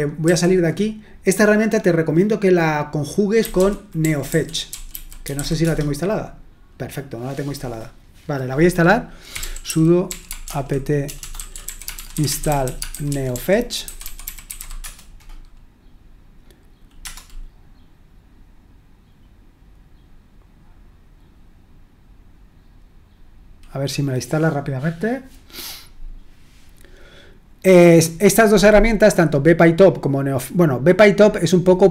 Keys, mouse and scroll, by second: 0.2 typing, 3.1-5.8 typing, 9.4-14.6 typing, 14.8 Return, 17.0 Return.